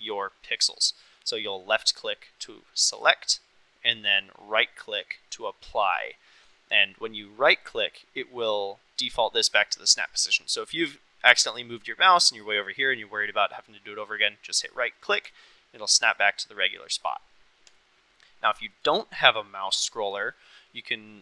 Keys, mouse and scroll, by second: 15.2-21.2 right drag.